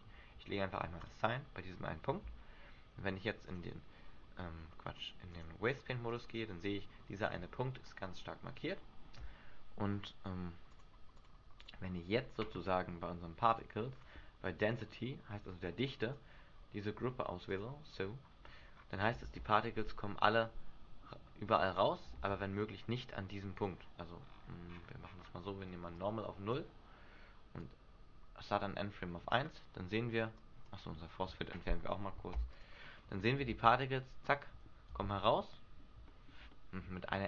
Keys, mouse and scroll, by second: 1.2 click, 2.4 Tab, 3.6 click, 5.4 click, 7.5 Tab, 8.2 middle click, 9.3 Tab, 10.8 click, 11.3 click, 13.6 click, 14.1-14.8 scroll down 1, 14.8 click, 14.8-15.1 scroll down 2, 18.6 scroll down 2, 19.4 alt+a, 19.4-19.7 scroll down 1, 20.9 middle click, 21.6-22.1 scroll up 5, 22.3 alt+a, 24.4-25.4 scroll up 10, 25.4-26.1 scroll down 1, 26.1 click, 27.7 click, 29.4-29.8 scroll down 4, 30.5 click, 31.7 right click, 32.4 Delete, 33.6 alt+a, 35.2 alt+a, 35.5 middle click, 36.1 shift+middle click, 36.6 middle click.